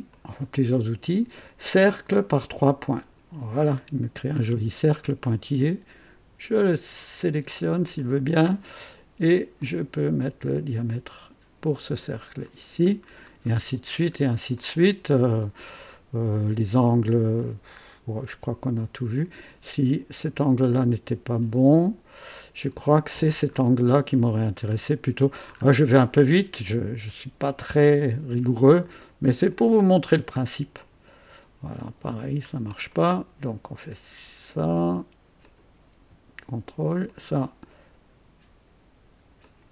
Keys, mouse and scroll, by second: 0.0 click, 2.9 click, 4.3 scroll up 2, 6.6 click, 7.8 click, 9.5 click, 10.8 click, 12.9-13.3 scroll down 2, 13.6-14.4 scroll down 4, 14.5-15.7 right drag, 14.5 click, 15.8-16.1 scroll up 2, 17.4-17.7 scroll down 2, 17.9 scroll up 2, 23.5-23.8 scroll up 2, 24.1 right click, 24.6 scroll up 2, 25.5 scroll up 2, 25.9 right click, 27.9 click, 29.3 ctrl+click, 30.7 click, 31.7 click, 32.4-32.7 scroll down 2, 32.9-33.4 right drag, 35.4 click, 37.0 ctrl+click, 39.4 ctrl+click.